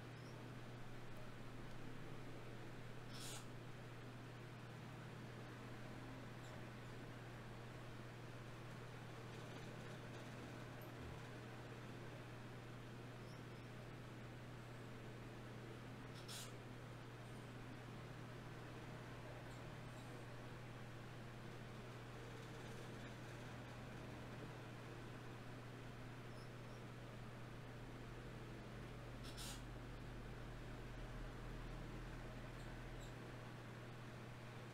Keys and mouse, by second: 0.8 f, 1.4-3.2 drag, 1.8 f, 3.2-5.6 middle drag, 3.6 f, 5.6 KP_1, 6.2 ctrl+KP_1, 10.7 ctrl+Tab, 12.1-13.9 drag, 14.9 e, 17.7 KP_1, 20.9-23.6 drag, 21.9 g, 23.6 right click, 25.4 e, 27.2-32.6 drag, 31.6-34.6 right drag, 31.8 g, 32.8 g, 34.4-34.7 drag.